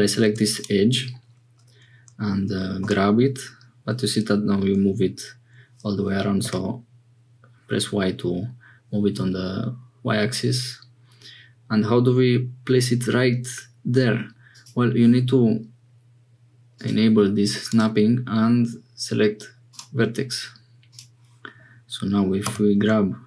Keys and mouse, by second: 0.2 2, 2.8 g, 16.7 click, 17.6-21.0 drag, 22.5 g.